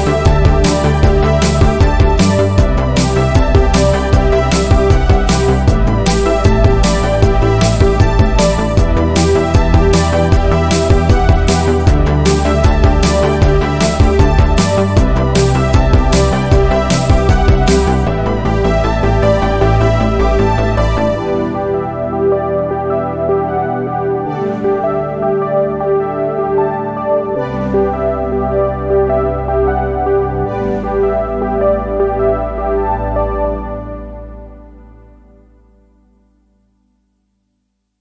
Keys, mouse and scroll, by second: 0.2 s, 0.9 scroll down 2, 2.5 scroll up 3, 2.9-4.7 shift+middle drag, 4.7 click, 5.7 click, 6.6 click, 7.6 click, 7.8 scroll up 6, 9.9 click, 10.5 middle click, 11.2 KP_1, 12.2 s, 13.7 click, 14.1-15.1 scroll down 1, 15.1 alt+click, 15.8 scroll down 1, 16.1-18.2 shift+middle drag, 19.4 right click, 20.2-20.8 scroll down 2, 20.8 ctrl+z, 21.1 ctrl+z, 21.3 ctrl+z, 21.6 ctrl+z, 21.9 ctrl+z, 22.5 click, 22.8-23.6 scroll up 1, 23.6 ctrl+r, 28.8 r, 35.4 ctrl+z.